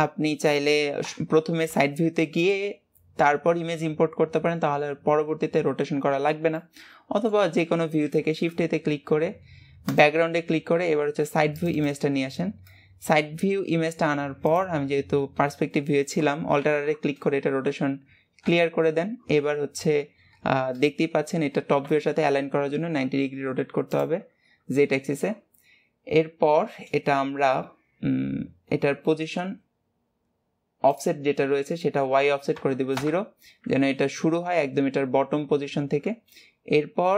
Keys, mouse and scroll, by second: 0.0-1.2 middle drag, 1.2 KP_3, 6.7-7.8 middle drag, 7.8-10.4 scroll up 1, 10.4-11.4 scroll up 1, 11.4-12.0 scroll up 1, 12.0-12.8 scroll up 1, 12.8-14.6 middle drag, 14.6-34.3 drag, 34.3-35.8 scroll up 2, 35.8-36.2 scroll down 2.